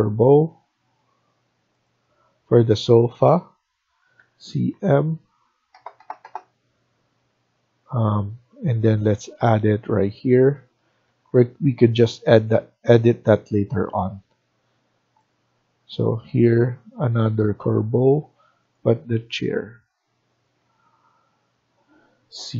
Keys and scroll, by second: 4.1-6.2 typing, 10.7 Escape, 11.0 Escape, 22.3-22.5 typing.